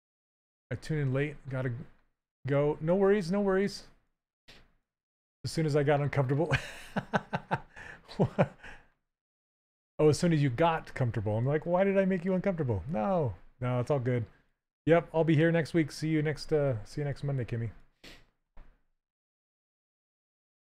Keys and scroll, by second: 16.8 s.